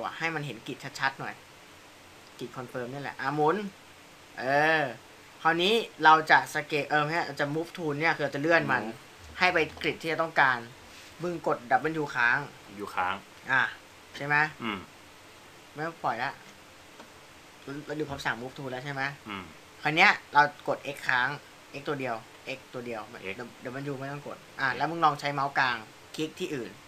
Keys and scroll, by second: 12.8 w, 22.4 x.